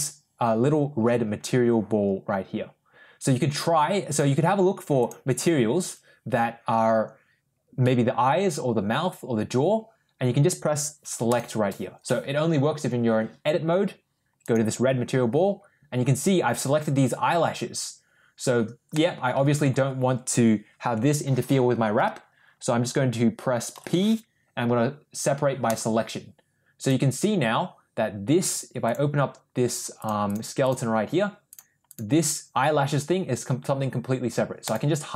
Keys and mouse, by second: 4.0 click, 4.9 click, 5.2 click, 14.3 click, 18.8 middle click, 23.6 p, 28.7 click, 29.8 click, 34.5 click.